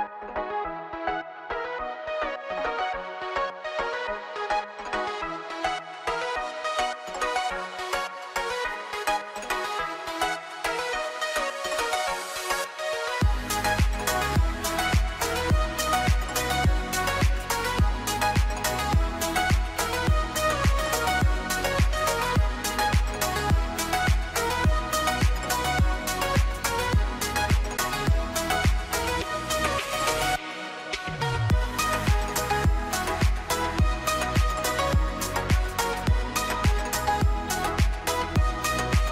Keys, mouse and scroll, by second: 0.0 middle click, 0.7 shift+a, 2.3 s, 3.6 middle click, 3.9-4.7 scroll up 3, 4.1 middle click, 4.7 middle click, 5.4 s, 6.1 middle click, 6.3 s, 7.0 middle click, 7.4 click, 7.9 middle click, 9.1 r, 10.4 r, 11.4 middle click, 12.2 click, 12.6 middle click, 13.4 shift+middle click, 13.7-14.4 scroll up 3, 14.0 middle click, 14.4 middle click, 14.8-15.9 scroll up 1, 16.1 s, 17.1 middle click, 18.9 r, 21.0 click, 21.4 middle click, 22.4 s, 23.6 middle click, 24.1 scroll up 1, 24.3 middle click, 24.9 middle click, 26.2 Tab, 26.3 middle click, 27.1 click, 27.6 click, 28.0 alt+click, 28.1 alt+click, 28.2 middle click, 28.5 s, 29.5 middle click, 30.3-30.7 scroll up 2, 30.7 shift+middle click, 31.4 middle click, 33.1 s, 33.9 middle click, 34.8 click, 35.2 middle click, 36.2-36.9 scroll down 2, 36.4 middle click, 37.3 middle click, 38.1 middle click, 38.6 ctrl+r.